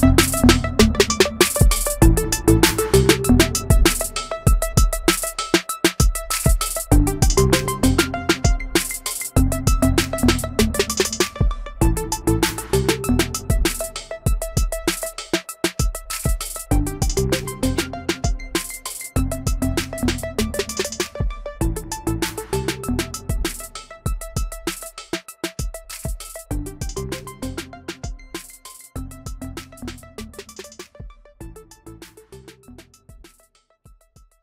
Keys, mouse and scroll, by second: 0.6 Delete, 7.8 ctrl+f, 32.1 Escape.